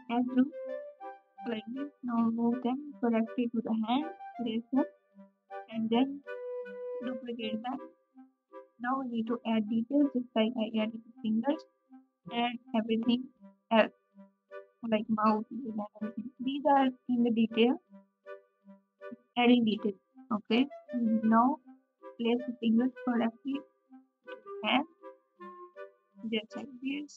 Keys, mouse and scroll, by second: 5.2 shift+g, 11.7 l, 11.7 r, 21.4 l.